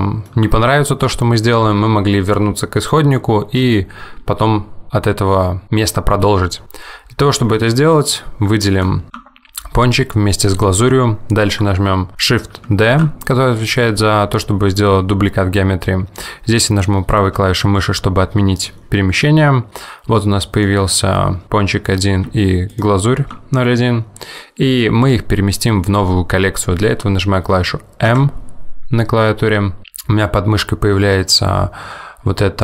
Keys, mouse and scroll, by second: 0.0 middle click, 0.6 Tab, 8.0 ctrl+click, 9.1 shift+click, 13.0 shift+d, 20.6 click, 22.8 shift+click, 28.2 m.